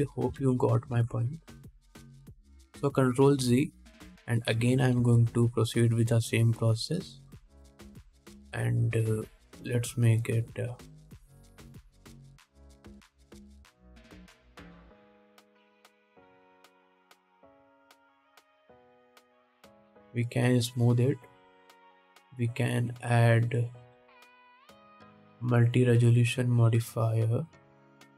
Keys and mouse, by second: 1.1 ctrl+z, 1.6 ctrl+z, 2.2 ctrl+z, 5.8 g, 19.8-21.5 drag, 20.3 ctrl+Tab.